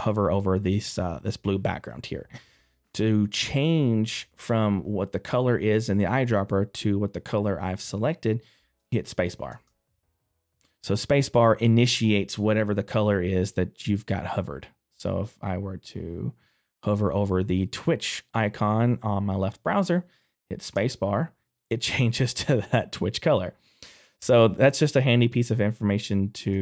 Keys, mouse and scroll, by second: 9.5 space.